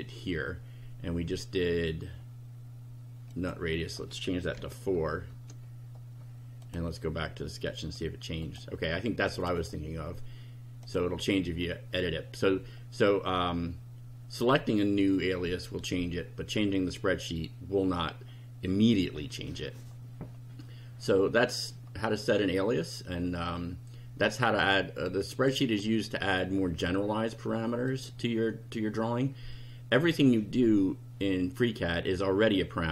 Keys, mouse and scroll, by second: 3.3 click, 4.5 KP_4, 5.3 KP_Enter, 6.6 click, 7.8 click, 8.4 click, 9.4 click, 10.8 click, 25.3 click, 27.9 click, 29.9 click.